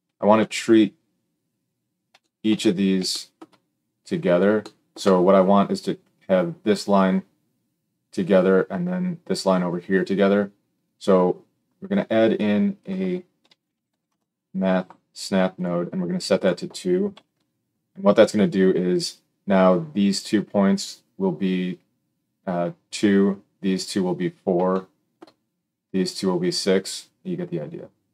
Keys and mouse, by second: 12.3-15.6 drag, 15.6 middle click, 16.3-28.1 drag.